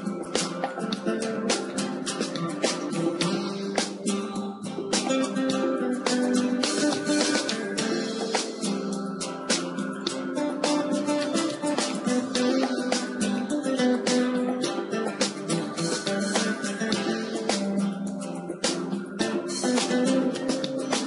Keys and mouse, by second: 1.0-5.5 drag, 5.5 KP_0, 7.4-10.2 drag, 11.1-13.0 drag, 13.4-17.8 drag, 18.0-20.8 drag.